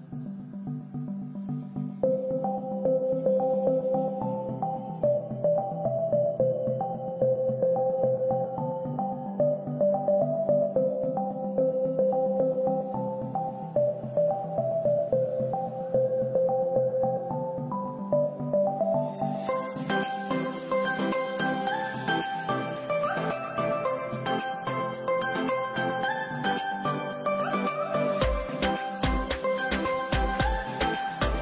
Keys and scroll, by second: 6.3 c, 7.2 Escape, 12.1 ctrl+r, 12.6 Escape, 19.7 Escape, 21.1 c, 21.4 Escape.